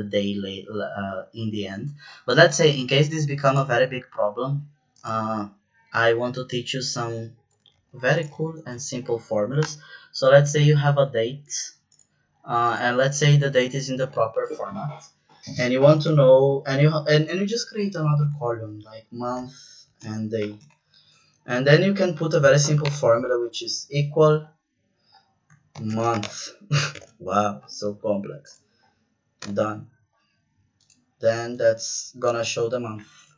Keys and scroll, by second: 7.7 ctrl+c, 8.3 ctrl+v, 9.6 BackSpace, 15.5-16.9 typing, 17.5 Up, 17.7 Right, 19.5-20.8 typing, 21.3 Left, 22.8 =, 25.4-26.9 typing, 29.3 Return.